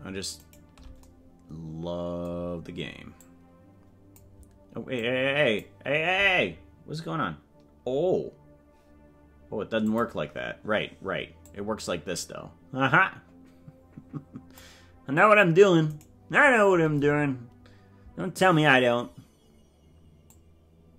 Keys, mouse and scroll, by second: 3.2-4.3 drag, 5.0 click, 10.0 click, 11.4-14.8 drag, 16.0 right click, 20.3-20.9 drag.